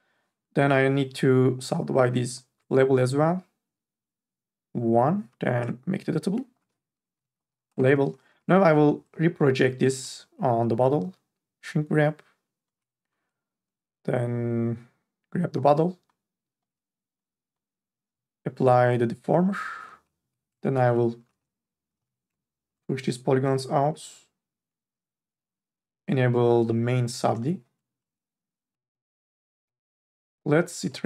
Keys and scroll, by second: 5.6 c, 7.1 l, 7.4 b, 7.7 Return, 8.4 4, 20.2 3, 20.9 ctrl+a, 21.9 m, 22.2 z, 27.3 n, 27.6 a.